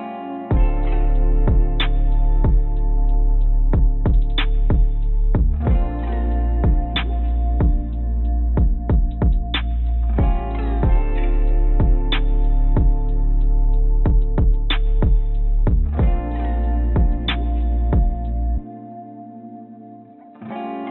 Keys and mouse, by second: 2.6 middle click, 7.6 click, 8.4 shift+click, 8.7 shift+click, 9.4 click, 10.6 click, 11.6 shift+click, 12.1 shift+click, 12.7 shift+click, 13.8 shift+click, 14.3 shift+click, 15.6-17.2 shift+drag, 18.8 click, 18.9-20.9 middle drag.